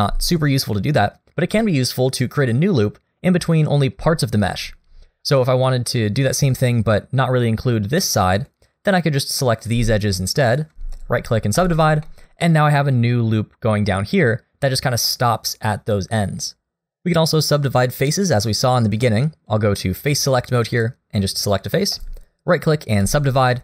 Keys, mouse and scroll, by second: 7.0 middle click, 8.2 middle click, 8.5-8.9 scroll down 1, 8.9 click, 9.4 middle click, 10.0 shift+click, 10.5 shift+click, 11.0 right click, 12.0 middle click, 14.2 middle click, 15.4 middle click, 19.5 click, 20.0 click, 20.7 click, 21.2 middle click, 22.0 right click, 23.5 middle click.